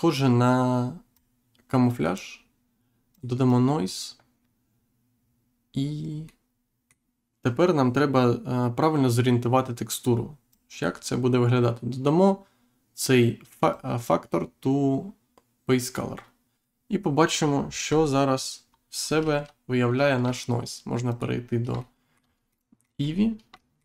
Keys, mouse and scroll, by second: 1.1 click, 3.0 click, 6.2 middle click, 10.4 click, 13.6 click, 17.8 Insert, 18.6-19.3 scroll up 1, 21.0 click, 21.7 shift+middle click, 22.9-23.3 scroll up 1.